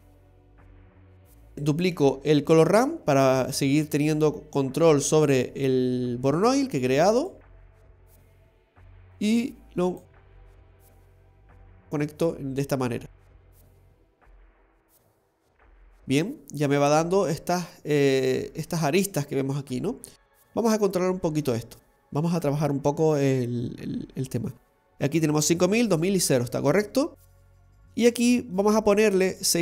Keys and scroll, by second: 10.9 typing.